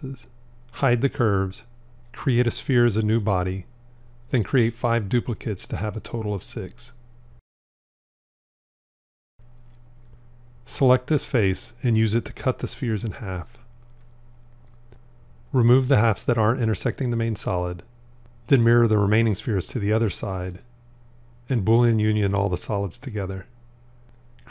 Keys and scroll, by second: 1.1 h, 5.5 shift+d, 10.9 c, 21.2 alt+x, 23.1 q.